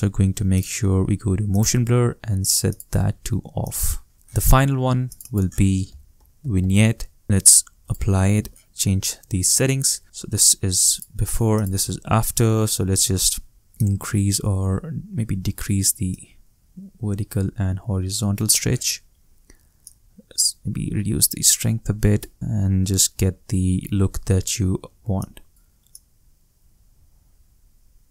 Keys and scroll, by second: 5.6-7.2 typing.